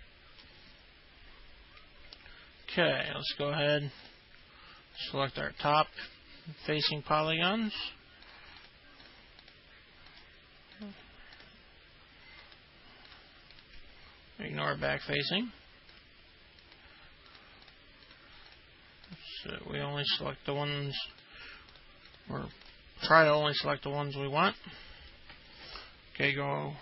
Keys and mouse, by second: 0.0 alt+middle click, 5.2 ctrl+click, 5.8 ctrl+click, 7.8 ctrl+click, 8.8 ctrl+click, 9.6 ctrl+click, 11.0 ctrl+click, 11.6 click, 13.3 ctrl+click, 16.8 ctrl+click, 17.5 ctrl+click, 18.3 ctrl+click, 19.3 ctrl+click, 19.7 ctrl+click, 20.1 ctrl+click, 20.5 middle click, 21.2 ctrl+click, 21.9 ctrl+click, 22.3 ctrl+click, 22.8 ctrl+click, 24.4 alt+middle click, 25.3 alt+middle click.